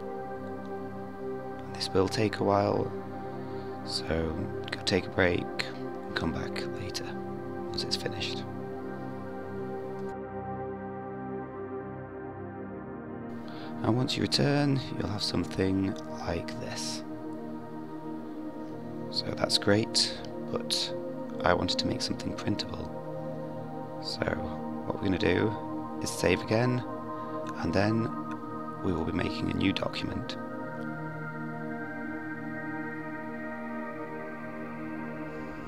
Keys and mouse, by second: 6.1-8.2 drag.